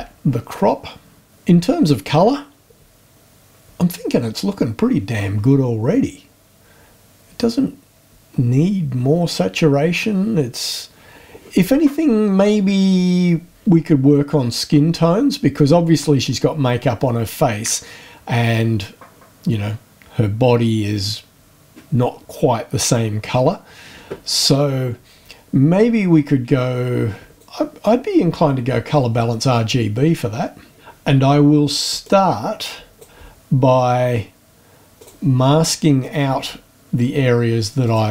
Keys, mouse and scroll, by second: 12.2-12.7 scroll up 2, 27.4 click, 30.8 click, 32.0-33.2 drag, 34.9 click, 36.2-36.6 scroll down 1, 37.8 click.